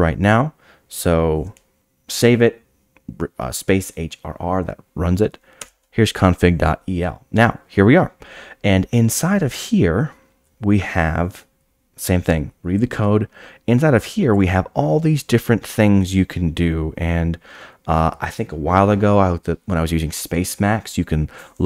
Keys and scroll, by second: 5.6 Return.